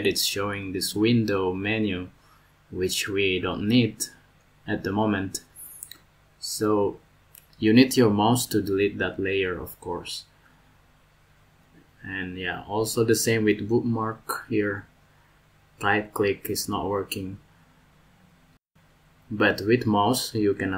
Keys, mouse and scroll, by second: 13.4 right click.